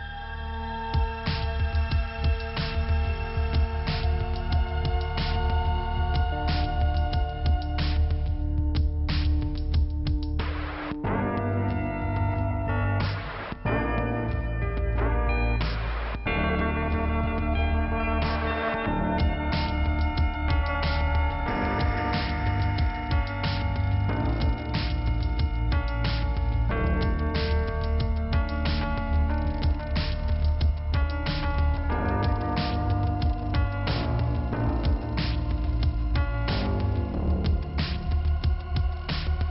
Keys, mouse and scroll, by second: 1.1-1.9 scroll up 1, 2.8 click, 4.3 click, 6.3-7.1 scroll down 1, 10.6 click, 13.4 click, 13.5 click, 13.6 click, 13.7 click, 16.9 click, 19.2 click, 22.6 click, 22.7 click, 24.4 click, 25.2 click, 27.4-27.9 scroll up 1, 29.4 click, 31.4 click, 32.4 middle click, 33.5 click, 35.2 click, 38.3 click, 39.2 scroll up 1.